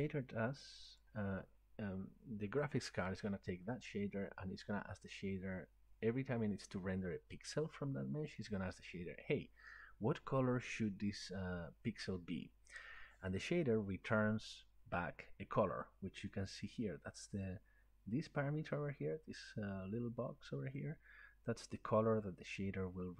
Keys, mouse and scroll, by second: 1.0 click, 16.7 click.